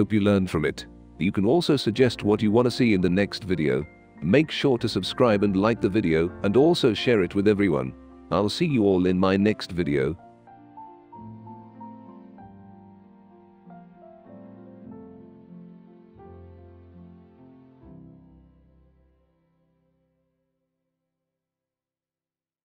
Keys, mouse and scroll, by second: 0.0 click, 1.2-2.6 typing, 1.2-3.3 right drag, 4.5 click, 5.0 click, 5.4-6.9 drag, 7.3-7.8 drag, 8.1 r, 8.3 click, 9.0 ctrl+z, 9.4 click, 10.5 w, 10.6 click, 11.5 click, 12.7 r, 13.0 click, 13.7 w, 14.0 click, 14.9 click, 16.3 click, 16.9 click, 17.6 click, 18.1 click, 18.8 g.